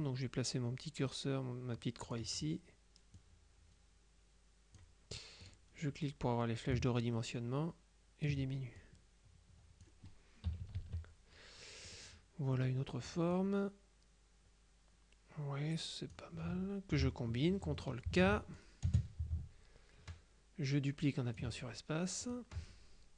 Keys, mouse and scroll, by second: 3.2-5.4 drag, 5.5 click, 6.8-8.8 ctrl+drag, 9.0-10.4 drag, 10.6 KP_Subtract, 12.0 click, 12.6 middle click, 13.4-16.7 drag, 18.2 ctrl+k, 18.6-22.0 ctrl+drag, 19.0 space, 22.3 click.